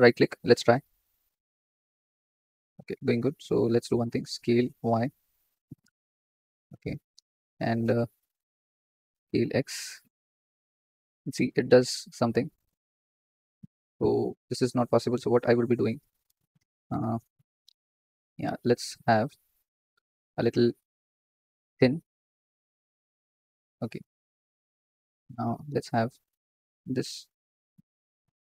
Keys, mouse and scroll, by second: 0.0-2.3 right drag, 2.3 ctrl+z, 4.1 s, 8.1 KP_7, 8.9 s, 12.6 ctrl+z, 12.8 ctrl+z, 14.3 ctrl+z, 17.9 click, 19.1 middle click, 20.6 a, 21.1 s, 24.2 click, 24.8 click, 25.4 s, 25.5 s, 28.0 ctrl+click.